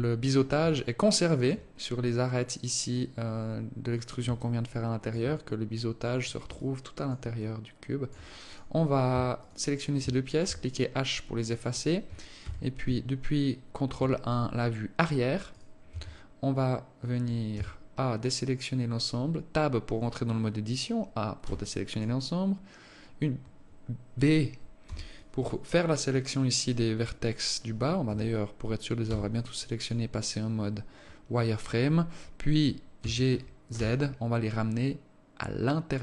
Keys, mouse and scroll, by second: 1.1 alt+click, 2.4-2.8 scroll up 3, 4.8 alt+click, 7.0 alt+click, 7.8 alt+click, 8.8 right click, 9.8 shift+right click, 10.8 h, 12.8 ctrl+KP_1, 14.6 alt+shift+click, 15.9 right click, 16.3 Tab, 18.0 a, 21.8 b, 25.2 b, 28.4 z, 29.4 b, 33.4 g.